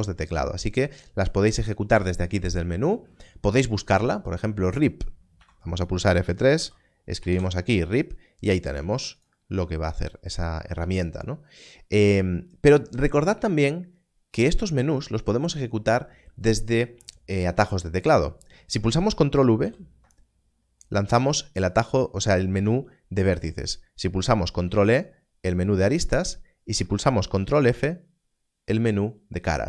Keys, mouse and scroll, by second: 5.3 click, 6.5 r, 7.2 p, 12.7 click, 19.0 click, 19.6 ctrl+v, 24.1 ctrl+v, 24.6 ctrl+e, 27.4 ctrl+f.